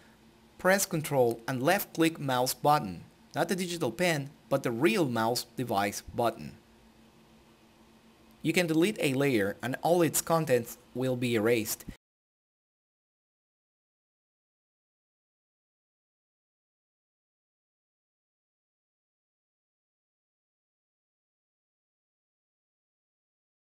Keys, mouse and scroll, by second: 0.4-9.8 ctrl+drag, 10.4 click, 16.3-16.8 scroll down 1, 18.2 click, 20.0-21.2 typing, 21.3 Return, 22.3 click.